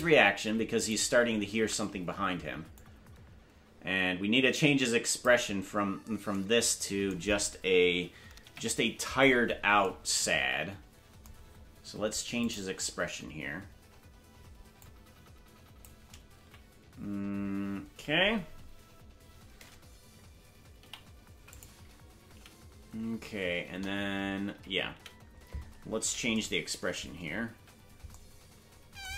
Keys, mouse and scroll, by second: 0.8 right click, 1.5 ctrl+Tab, 2.7-5.2 drag, 8.4 KP_Decimal, 12.4 click, 14.8-15.8 drag, 16.4 a, 22.3 Right, 22.3 i, 23.6 KP_0, 24.5 Left, 25.0 Right, 27.4 KP_Decimal.